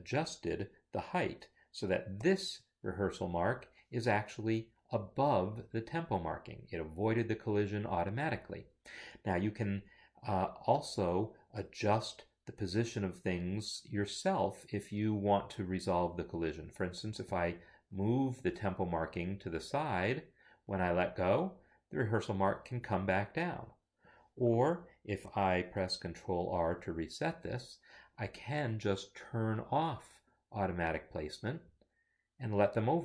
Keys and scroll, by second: 2.3 shift+b, 3.2 Escape, 26.7 ctrl+r.